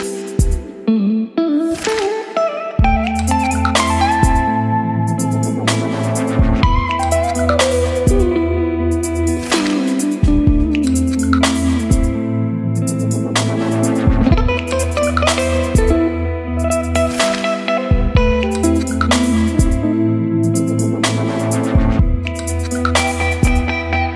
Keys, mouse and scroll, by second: 16.3-17.8 scroll down 2, 17.8-24.1 drag, 23.9-24.1 typing.